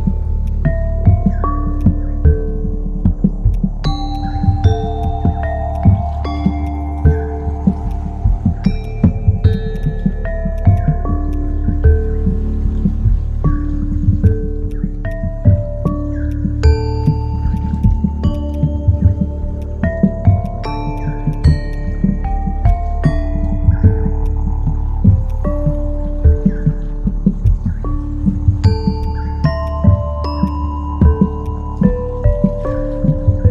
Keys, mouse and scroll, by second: 1.8 shift+click, 4.1 shift+click, 5.7 shift+click, 6.6 shift+click, 10.5 right click, 12.9 right click, 18.5 double click.